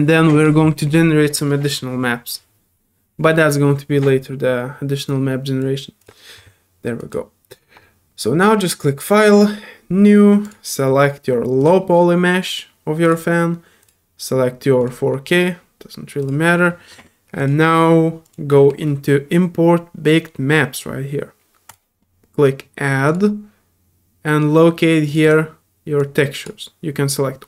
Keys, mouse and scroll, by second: 5.1-27.4 drag.